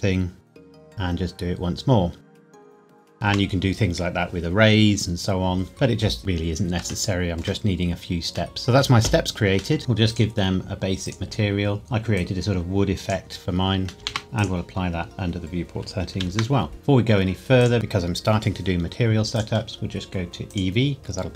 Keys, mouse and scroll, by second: 0.3 scroll up 1, 0.5 g, 0.8 z, 2.2 click, 2.3 g, 2.4 y, 2.9 click, 3.1 middle click, 3.3 Tab, 6.2 scroll down 1, 7.1 shift+middle click, 8.2-8.5 scroll down 1, 8.5 middle click, 9.8 click, 13.9 middle click, 14.0 ctrl+c, 14.2 scroll down 1, 14.4 click, 14.8-15.7 scroll down 1, 16.1 ctrl+v, 16.7-17.6 scroll up 1, 17.6 click, 19.3 click, 21.0-21.3 scroll down 1.